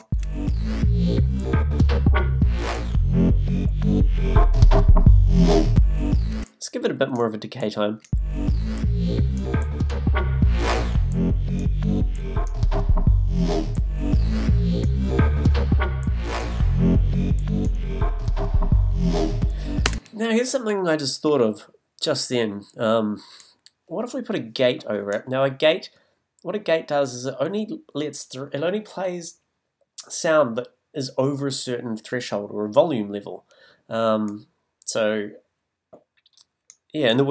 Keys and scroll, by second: 0.0 space, 6.3 space, 8.0 space, 19.8 space.